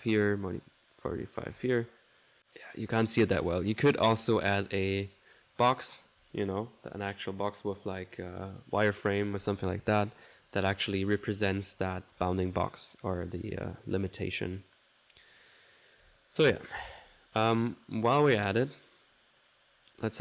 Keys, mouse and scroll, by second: 0.6 click, 3.6-4.7 middle drag, 13.1 click, 15.4 click, 16.3 click, 18.5 click, 19.2 middle click, 19.8 click.